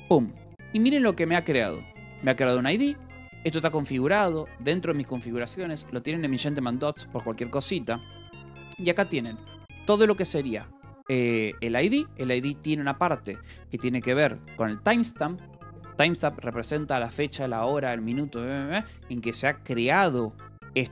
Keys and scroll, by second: 1.3 k, 2.9 shift+v, 3.0 Escape, 3.3 l, 8.7-9.5 typing.